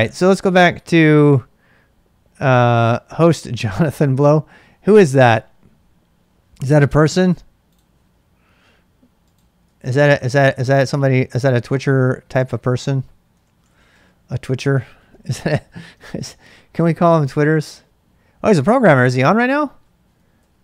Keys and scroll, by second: 9.6 super+Tab, 13.1-16.1 typing, 20.4 Return.